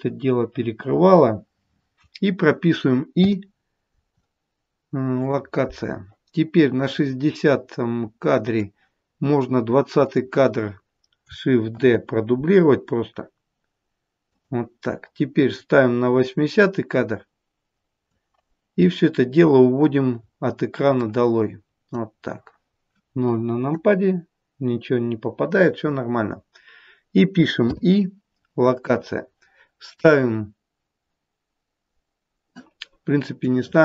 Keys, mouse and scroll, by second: 0.5 KP_0, 3.1 i, 6.8 click, 10.0 click, 11.7 shift+d, 15.3 click, 19.8-20.9 scroll down 1, 20.9 click, 20.9-21.3 scroll down 2, 23.6 KP_0, 24.5 KP_0, 27.6 i, 33.5 click.